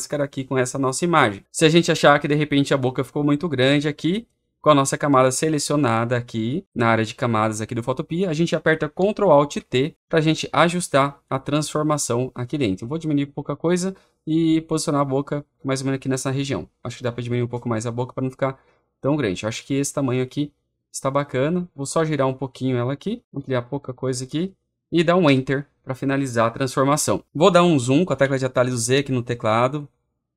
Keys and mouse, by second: 8.8 click, 9.3 ctrl+alt+t, 12.9 click, 14.0-21.3 drag, 22.8 click, 23.4 click, 25.1 Return, 28.1 z, 29.6 click.